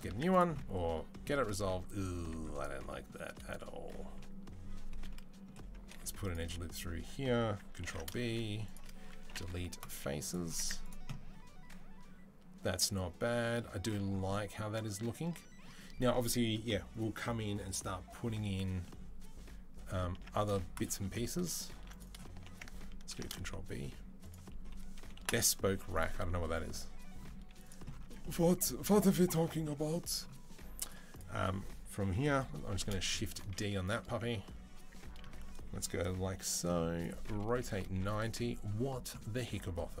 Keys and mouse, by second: 2.0 Tab, 5.7 ctrl+r, 7.7 ctrl+b, 9.1 Delete, 9.8 middle click, 9.8 z, 10.4 Tab, 10.7 drag, 10.8-22.1 middle drag, 20.5 click, 20.9 Tab, 21.6 ctrl+r, 22.9 ctrl+b, 25.0 Delete, 26.8 middle click, 27.0-40.0 middle drag, 27.2 z, 27.9 Tab, 32.6 shift+d, 33.7 KP_3, 34.0 KP_1, 34.7 Tab, 35.2 a, 36.2 g, 37.1 r.